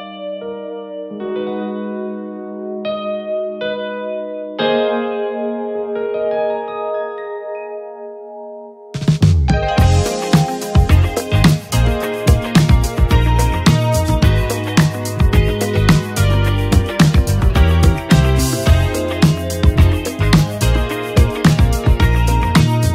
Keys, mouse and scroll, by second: 8.1 ctrl+space, 8.6-10.6 typing, 12.2-18.1 drag, 12.6-13.3 typing, 18.1 space.